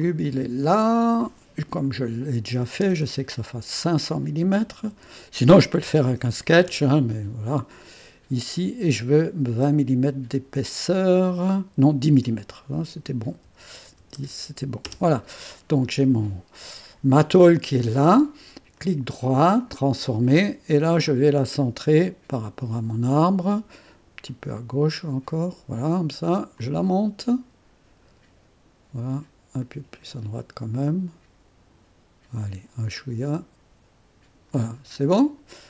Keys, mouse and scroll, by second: 0.0 click, 1.0 click, 1.3 click, 2.0 5, 2.4 0, 2.7 KP_0, 3.8 click, 4.4 KP_5, 4.6 click, 4.8 KP_5, 5.8 BackSpace, 6.3 KP_0, 6.6 KP_0, 8.5 click, 9.5 KP_2, 13.3 BackSpace, 13.9 KP_1, 14.1 KP_0, 14.8 Return, 18.7 right click, 19.6 click, 21.0-22.5 drag, 24.3-25.6 drag, 26.6-28.7 drag, 29.6-31.2 drag, 32.9-34.4 drag, 34.6 click, 35.2 click.